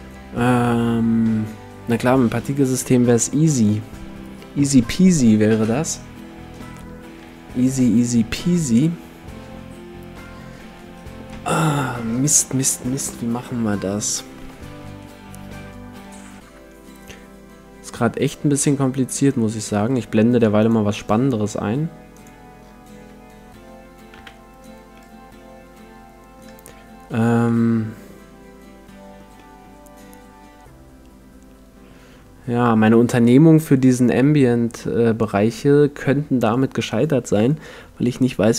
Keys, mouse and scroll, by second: 18.7-20.4 middle drag, 20.6-23.9 drag, 24.2 KP_5, 25.0-26.8 middle drag, 27.4-37.0 middle drag.